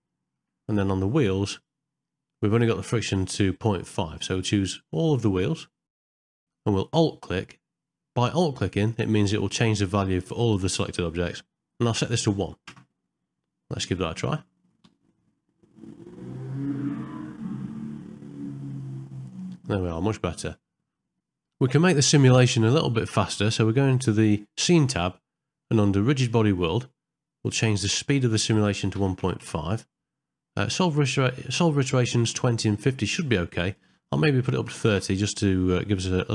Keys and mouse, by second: 1.5 click, 5.2 shift+click, 6.0 shift+middle click, 6.1 middle click, 6.4 shift+click, 8.9-12.7 alt+drag, 24.6 click, 25.4 middle click, 26.7 middle click, 27.7-29.5 drag, 33.7-35.0 drag.